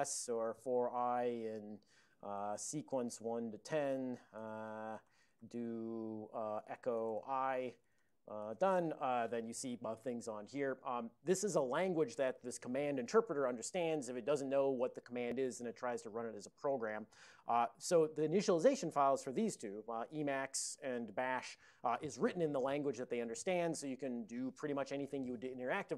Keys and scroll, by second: 0.0-3.8 typing, 5.4 typing, 6.7-9.1 typing.